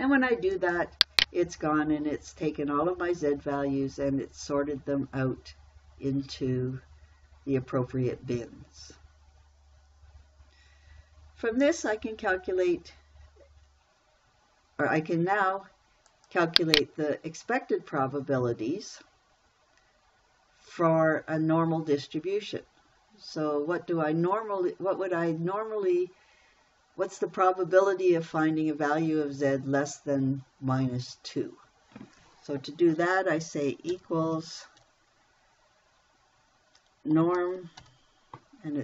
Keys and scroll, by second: 34.3 =, 37.6 n, 37.8 o, 38.2 r.